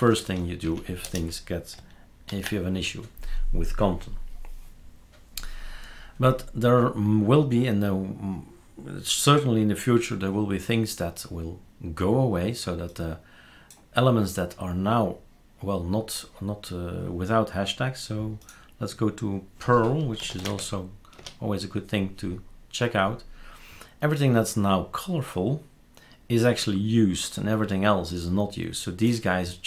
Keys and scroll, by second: 0.0 typing, 0.6 Up, 1.0 BackSpace, 2.3 ctrl+s, 19.9-20.9 typing, 21.1 Return.